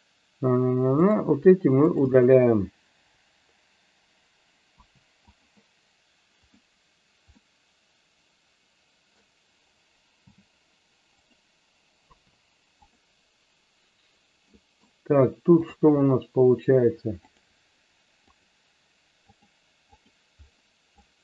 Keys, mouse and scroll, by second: 1.1 click, 3.0 BackSpace, 4.8 Delete, 6.4 click, 7.4-9.2 middle drag, 10.2 g, 11.2 click, 12.1 Delete, 14.6 middle click, 15.7 click, 17.3 click, 18.3 click, 19.4 click, 20.0 click, 21.0 click.